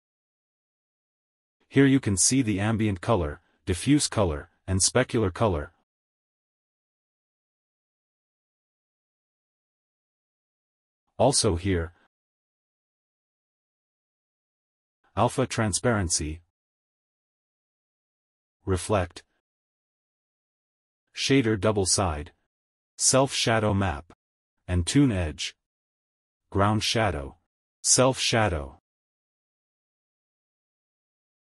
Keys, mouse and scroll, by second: 7.9 scroll up 1, 9.1-9.5 scroll up 2.